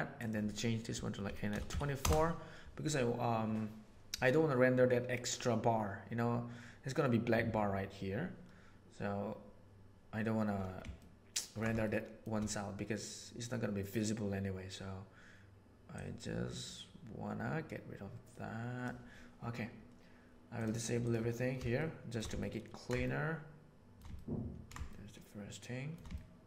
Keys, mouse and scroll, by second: 0.1-2.5 drag, 11.0 ctrl+middle click, 11.9 shift+middle click, 15.9-18.8 drag, 20.9 drag, 21.8 shift+middle click, 22.3 ctrl+middle click, 23.0 shift+middle click, 24.1-25.9 ctrl+middle drag, 26.1 ctrl+middle click.